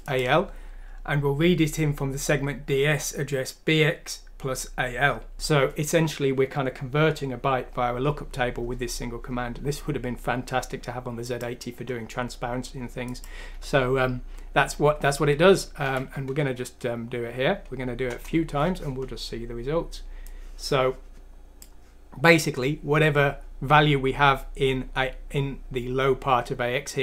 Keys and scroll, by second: 15.9 F6, 18.1 Return.